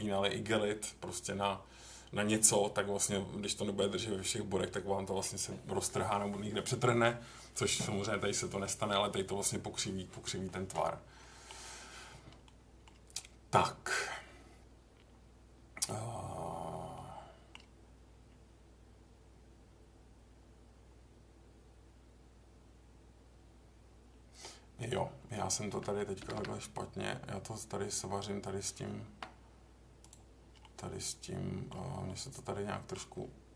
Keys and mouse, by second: 11.2 middle click, 12.4 middle click, 16.9 middle click, 26.2 g, 26.3 g, 29.0 Escape, 30.6-31.7 middle drag, 32.0 middle click.